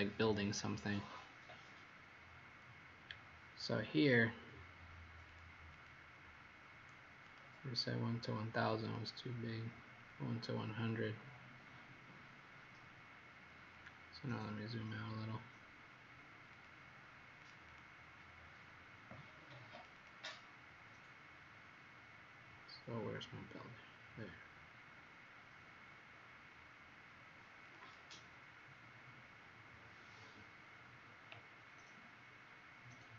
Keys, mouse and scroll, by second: 5.7 click, 7.2 click, 14.3-15.0 scroll down 2, 16.5 click, 18.4 middle click, 19.7 click, 19.9 click, 20.8 middle click, 27.6 click, 27.8 click.